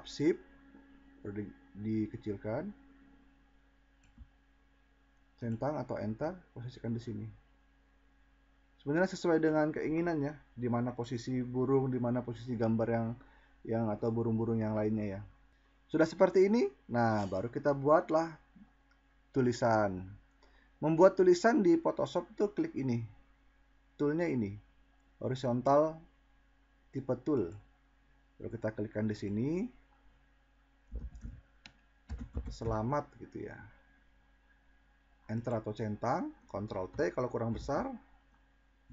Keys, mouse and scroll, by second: 29.3-29.7 drag, 36.8 ctrl+t.